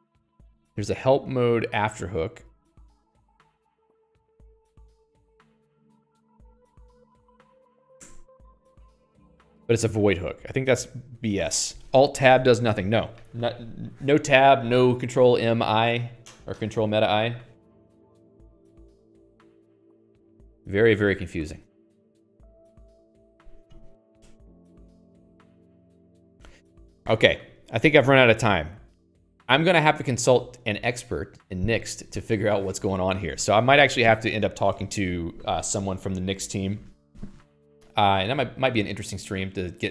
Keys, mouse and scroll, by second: 4.2-8.1 typing, 8.4 Return, 10.3 click, 10.6 q, 11.7 click, 18.3 Escape, 21.2 click, 21.4 Escape, 21.5 Escape, 21.8 k, 22.0 k.